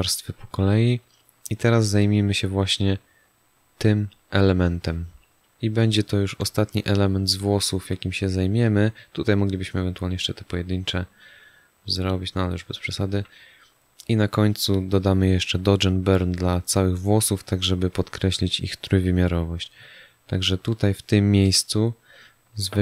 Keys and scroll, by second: 0.2 space, 5.8 space, 12.5 space.